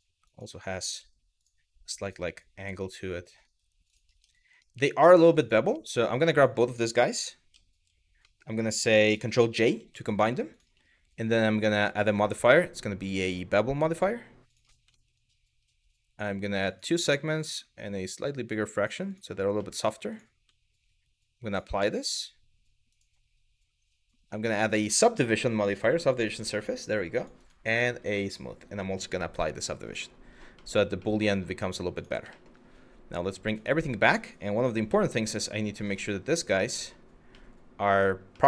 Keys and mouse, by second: 0.6 g, 1.6 click, 1.8 g, 2.3 click, 2.8 click, 3.5 click, 3.8 Tab, 4.2-4.5 middle drag, 4.9 drag, 5.4 middle drag, 5.6 click, 6.0 click, 7.1 z, 7.8 middle click, 9.4 ctrl+j, 9.8 click, 10.1 click, 11.5-14.2 drag, 14.6 shift+middle drag, 16.3 click, 17.0-18.5 drag, 19.3 middle click, 21.1-21.7 drag, 24.2-25.5 drag, 26.1 click, 28.7-29.3 drag, 29.5 click, 30.3 middle click, 30.7-31.0 middle drag, 31.6 click, 32.0 shift+middle click, 33.1 click, 34.4 g, 36.4 click, 37.1-37.5 middle drag, 38.0-38.4 middle drag.